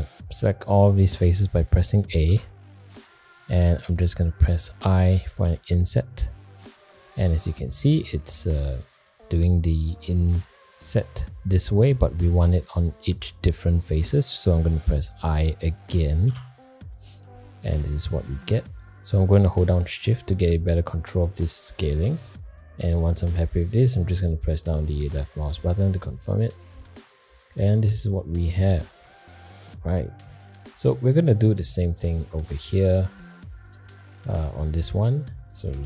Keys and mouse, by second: 2.3 a, 5.4 |, 26.6 middle click, 27.8 middle click, 29.5 middle click, 30.4 shift+middle click, 30.9 middle click, 32.2 Tab, 32.8-33.1 middle drag, 34.1 shift+middle click, 35.5 shift+a.